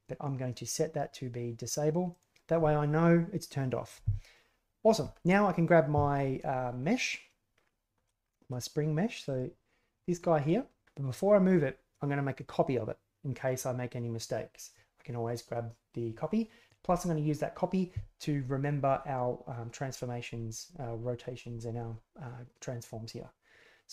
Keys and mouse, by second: 2.2 drag, 9.2 right click.